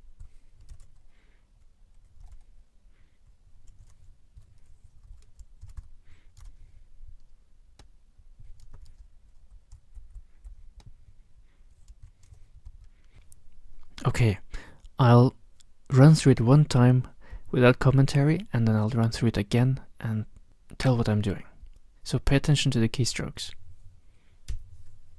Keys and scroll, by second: 0.1 b, 0.6 ctrl+y, 2.2 super+Up, 3.7 ctrl+x, 4.3 3, 5.0 shift+Right, 5.5 ctrl+c, 5.7 b, 6.3 super+Tab, 8.7 super+c, 11.9 ctrl+y, 12.6 shift+Left, 24.5 F3.